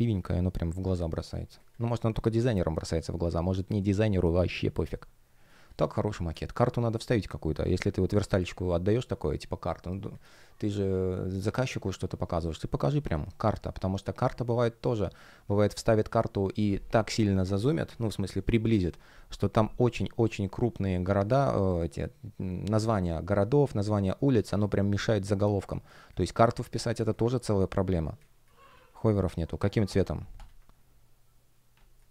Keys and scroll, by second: 28.1 space, 31.9 alt+l.